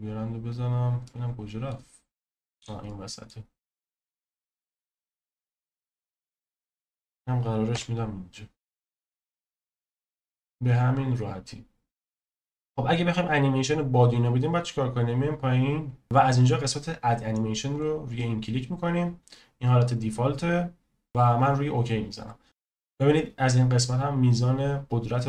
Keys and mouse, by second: 1.0-1.7 middle drag, 2.8-3.3 middle drag, 4.2 click, 5.8 click, 7.7 KP_0, 12.8 click, 17.9-21.4 drag.